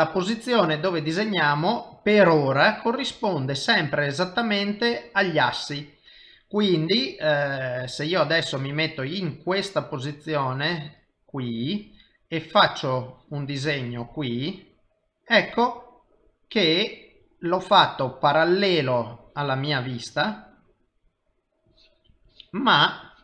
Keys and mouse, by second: 2.8 middle click, 4.0 middle click, 8.0 middle click, 12.3 click, 13.1 click, 14.4 middle click, 16.5 middle click, 19.2 click, 20.0 click, 20.6 middle click, 21.7 click, 22.3 click.